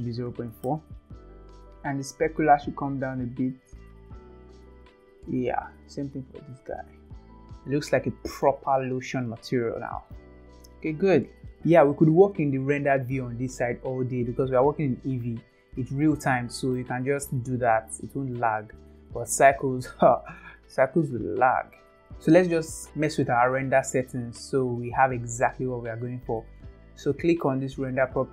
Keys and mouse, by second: 2.3-4.4 drag, 5.5 click, 7.0 click, 7.5 ctrl+s, 7.9-8.4 middle drag, 9.3-10.1 middle drag, 16.1-16.7 middle drag, 18.4-19.4 middle drag.